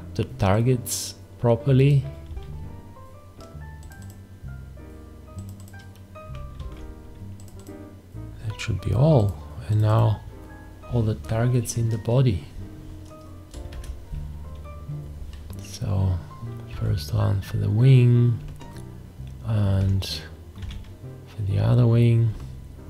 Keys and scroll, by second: 2.3 `, 6.6 alt+`, 13.7 shift+`, 16.7 `, 20.6 `.